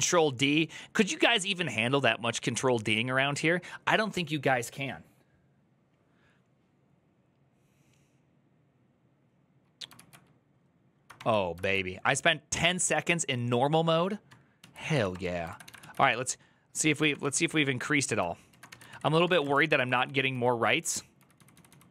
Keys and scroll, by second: 9.7 ctrl+u, 10.9 ctrl+d, 11.4 ctrl+u, 14.3 shift+a, 14.7 Up, 14.9 Return, 15.3 ctrl+a, 15.4 [, 15.6 ctrl+u, 16.9 ctrl+d, 18.4-21.9 typing, 18.7 ctrl+c.